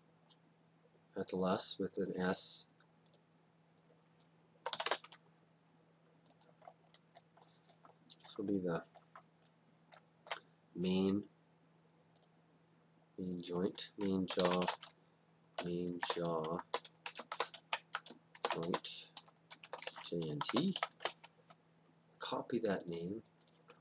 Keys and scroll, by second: 4.6 BackSpace, 4.8 s, 4.9 Return, 14.5 shift+m, 14.6 a, 14.7 i, 16.0-20.8 typing, 21.0 Return.